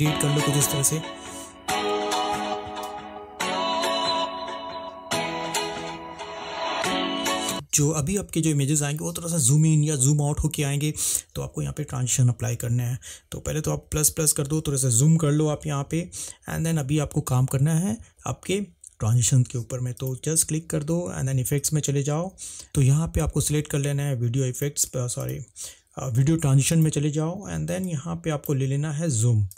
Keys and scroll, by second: 0.1 space, 7.6 space, 13.9 =.